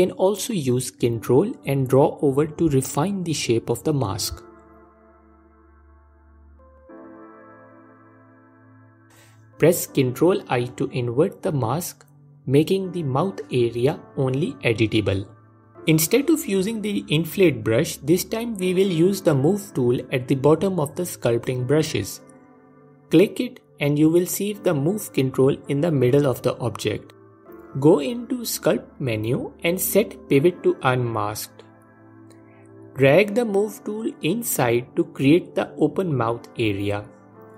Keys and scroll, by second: 9.3 ctrl+i.